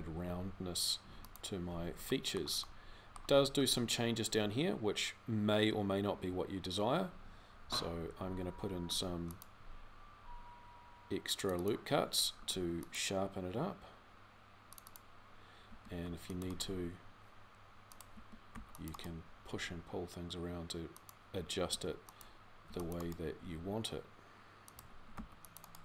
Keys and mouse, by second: 8.6 ctrl+r, 12.2 ctrl+r, 18.0 a, 21.5 a, 22.4 c, 23.2 g.